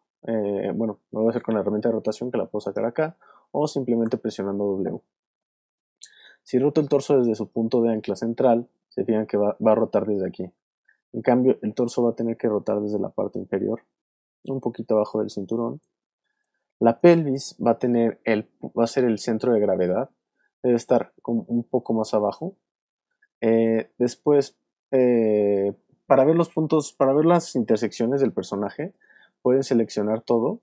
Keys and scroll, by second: 4.0 w, 7.8 super+z, 10.4 super+z, 23.1 space, 26.7 alt+space, 27.7 space, 28.0 v.